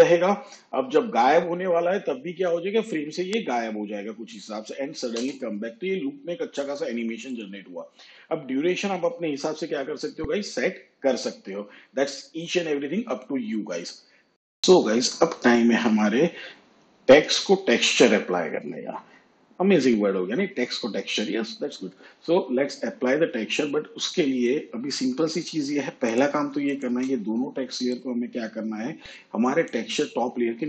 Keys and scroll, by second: 5.2 space.